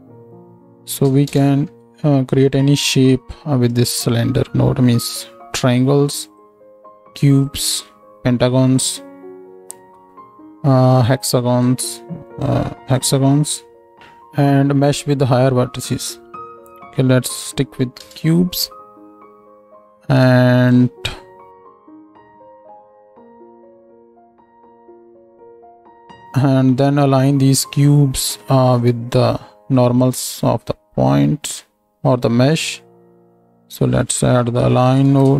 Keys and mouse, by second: 12.4 click.